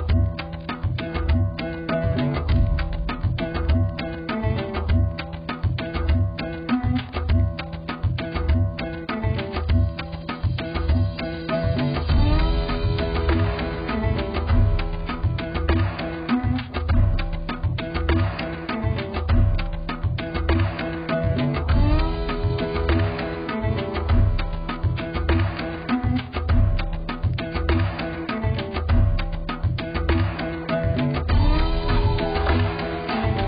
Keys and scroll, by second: 11.2 4, 20.8 2, 32.7 BackSpace, 33.0 BackSpace.